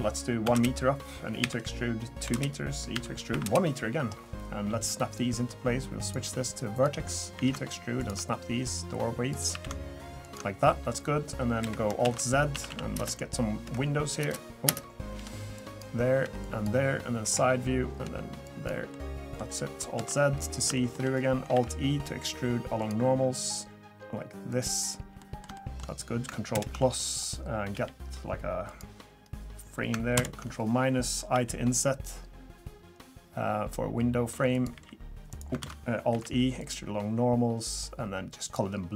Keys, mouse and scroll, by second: 1.4 e, 2.9 e, 5.1 click, 6.0 click, 7.3 e, 9.3 click, 9.5 e, 10.6 middle click, 11.6 KP_1, 12.0 alt+z, 12.7 a, 13.0 space, 13.6 Escape, 14.2 space, 14.6 space, 15.1 b, 16.2 b, 17.2 KP_3, 18.0 b, 18.9 middle click, 20.0 alt+z, 20.3 scroll up 1, 20.7 shift+middle click, 21.1 scroll down 2, 21.5 alt+e, 25.2 middle click, 25.5 shift+middle click, 25.8 scroll up 2, 26.5 ctrl+KP_Add, 27.7 g, 29.2 scroll up 1, 30.1 ctrl+KP_Subtract, 31.3 i, 34.7 e, 35.6 ctrl+z, 36.1 alt+e.